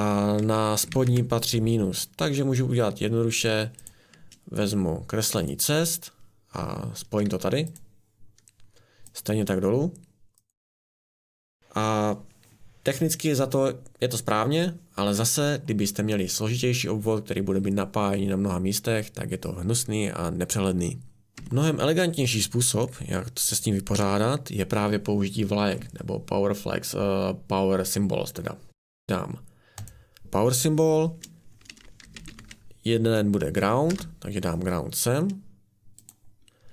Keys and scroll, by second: 0.4-1.4 typing, 21.3 Escape, 23.9 Delete, 31.7-32.7 typing, 33.8 Return.